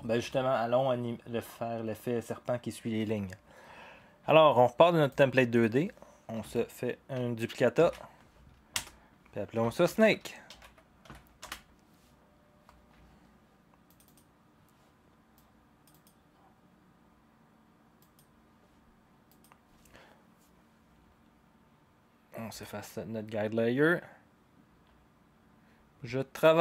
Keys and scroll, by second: 7.8 ctrl+d, 8.8 Return, 10.0-11.5 typing.